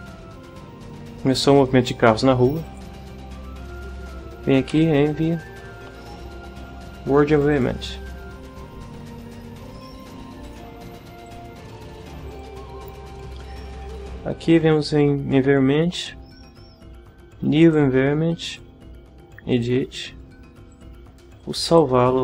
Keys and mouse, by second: 2.6 click, 4.2-5.2 typing, 7.3 click, 10.4 click, 11.3 click, 12.3 click, 15.9 click, 17.6 click, 18.5 click, 19.5 click, 20.7 click, 21.7 click.